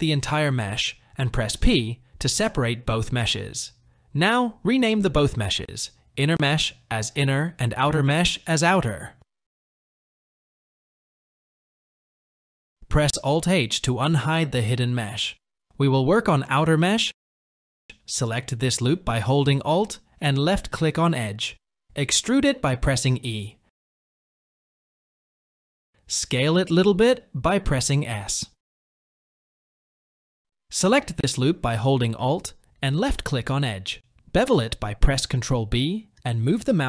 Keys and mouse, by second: 0.9 p, 3.8 click, 4.0 click, 5.7 n, 7.4 click, 7.7 click, 13.2 alt+h, 14.5 Tab, 16.6 Tab, 19.2 alt+click, 21.6 e, 26.4 s, 32.2 alt+click, 34.5 ctrl+b.